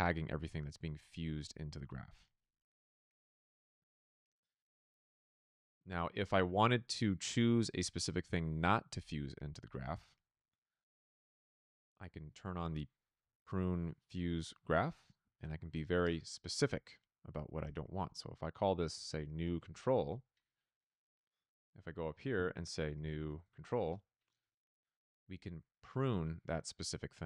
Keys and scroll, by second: 15.9 space, 18.6-20.0 typing, 21.9-23.8 typing.